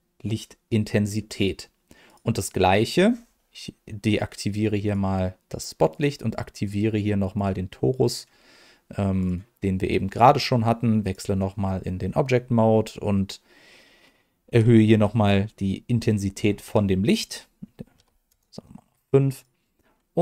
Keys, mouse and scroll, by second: 1.1 middle click, 2.0 click, 5.9 click, 7.3 click, 8.0 click, 9.2-11.1 drag, 14.4-15.4 drag, 16.3 scroll up 1, 17.2-18.3 drag, 17.2 scroll up 2, 19.3 click, 20.1 g.